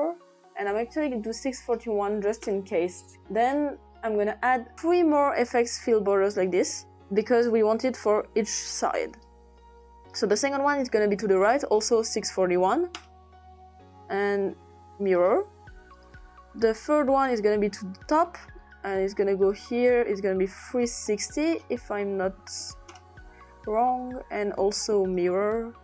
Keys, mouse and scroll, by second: 1.4 middle click, 1.7 click, 2.1 typing, 2.4 Return, 4.2 click, 6.3 click, 8.1 click, 9.1 click, 11.1 click, 11.9-13.0 typing, 14.1 click, 15.1 click, 16.0 click, 18.6 click, 19.4 click, 20.6 click, 21.3 click, 21.9-23.0 typing, 24.0 click, 25.1 click.